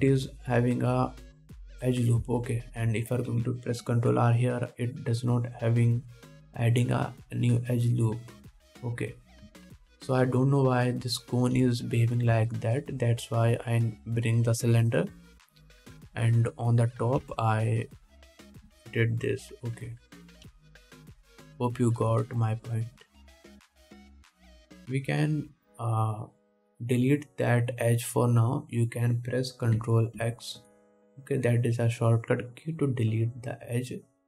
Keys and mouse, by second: 0.9-4.0 drag, 4.1 alt+a, 5.0 ctrl+r, 10.9 ctrl+Tab, 12.0-14.8 drag, 12.0 middle click, 12.0 right click, 12.8 x, 14.8-16.9 middle drag, 16.9 click, 17.4-19.6 middle drag, 18.4 Tab, 19.6 click, 19.9 Tab, 20.5-26.2 middle drag, 21.7 KP_1, 26.2-34.2 alt+drag, 31.4 ctrl+x.